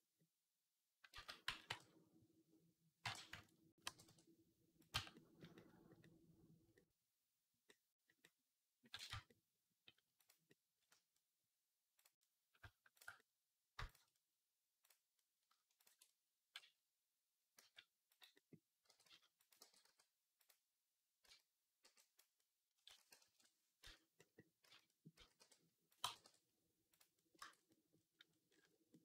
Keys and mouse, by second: 1.0 ctrl+z, 1.5 t, 2.8 t, 3.7 g, 4.8 Tab, 4.8-18.2 right drag, 8.9 Tab, 11.8 click, 13.7 shift+click, 15.6 ctrl+click, 16.4 g, 18.2-25.7 drag, 18.7 g, 19.4 g, 21.1 z, 21.7 b, 22.7-25.9 typing, 25.7-29.0 right drag, 27.2 Tab.